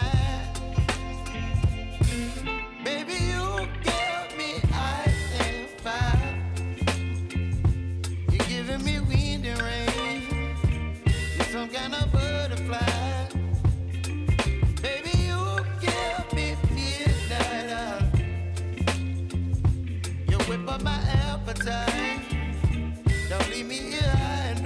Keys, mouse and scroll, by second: 4.8 space, 7.3-12.4 drag, 12.4 space, 13.8 click, 14.8 Return, 15.4 click, 15.7 F9, 16.3 click, 16.6 space, 18.7 space, 20.1-21.7 alt+drag, 21.8 space, 23.6 click.